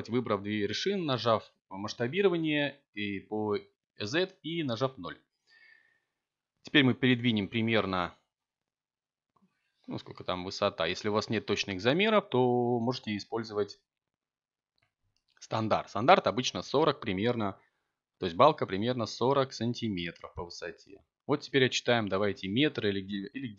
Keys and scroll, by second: 0.1 3, 3.2 z.